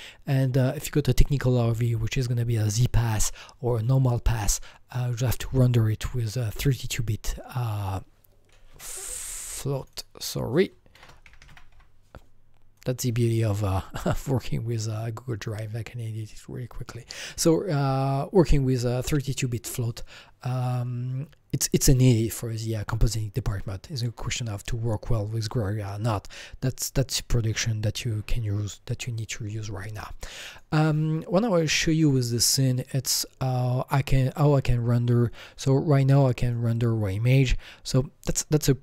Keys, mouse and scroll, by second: 8.7 Escape, 9.8 click, 9.9 double click, 10.7-12.2 typing, 12.7 click, 28.9 Escape, 28.9 click, 29.2 typing, 30.5 click, 31.5 click, 32.0 click, 36.4 click.